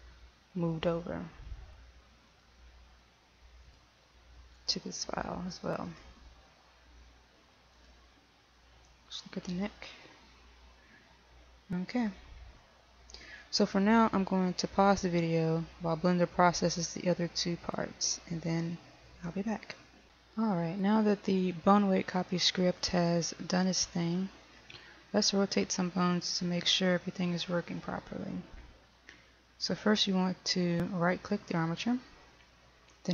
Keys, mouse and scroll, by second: 31.5 right click.